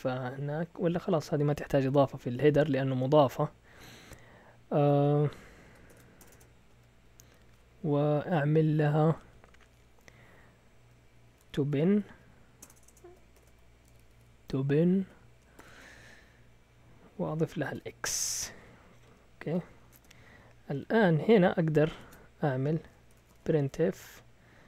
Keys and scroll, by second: 4.9 shift+Tab, 5.8-7.5 typing, 6.2 Return, 6.3 Return, 6.7 Up, 11.0-15.6 typing, 17.7 typing, 19.6-20.5 typing, 20.7 Escape, 21.7-24.6 typing.